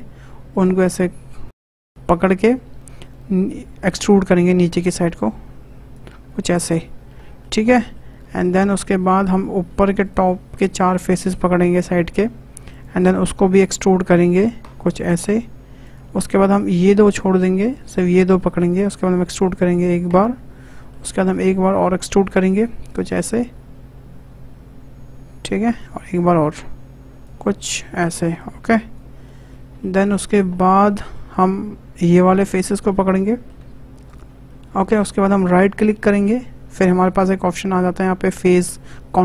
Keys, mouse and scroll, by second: 0.5 shift+click, 0.9-1.3 scroll down 3, 1.3 shift+middle click, 1.6-3.8 scroll up 4, 2.2 shift+middle click, 3.8 e, 6.3 scroll down 2, 6.4 middle click, 6.9-7.2 scroll up 2, 7.2-8.5 shift+middle drag, 8.5-9.2 scroll up 2, 9.2 click, 10.0 shift+click, 10.9 shift+click, 11.7 shift+click, 12.7 shift+click, 14.3 e, 16.5 ctrl+click, 17.5-19.0 shift+middle drag, 19.0 e, 20.5 scroll down 1, 20.8-22.4 shift+middle drag, 22.4 e, 25.9 e, 28.4 click, 29.2 middle click, 30.2-30.5 scroll up 2, 30.5-32.0 shift+middle drag, 32.0 click, 32.4-34.0 middle drag, 34.0 shift+click, 34.4-35.8 shift+middle drag, 35.8-39.2 right drag.